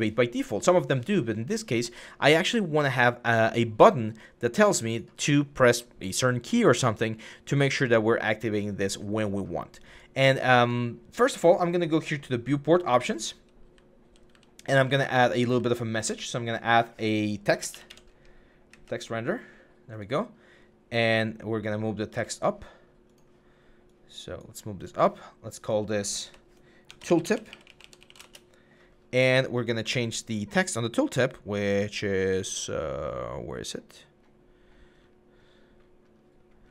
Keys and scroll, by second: 13.1-15.2 typing, 17.1-18.5 typing, 20.5-20.9 typing, 21.9 w, 26.0 F2, 26.8-28.3 typing.